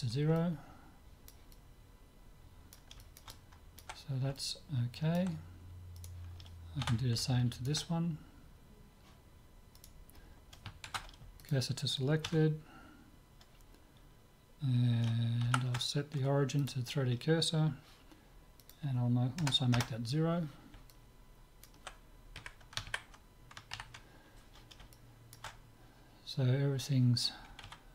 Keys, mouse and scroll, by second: 0.0-6.0 middle drag, 6.0 click, 6.0-7.8 right drag, 6.8 Tab, 7.3 click, 7.8-9.2 middle drag, 9.8-11.3 right drag, 10.9 shift+s, 11.3 click, 12.3 Tab, 18.6-20.6 drag, 20.9-22.4 middle drag, 22.4 KP_1, 25.0-26.8 middle drag.